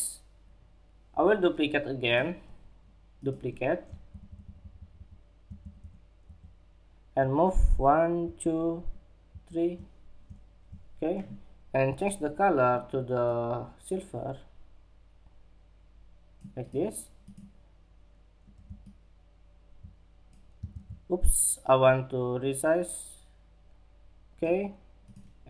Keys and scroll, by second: 20.3 super+z.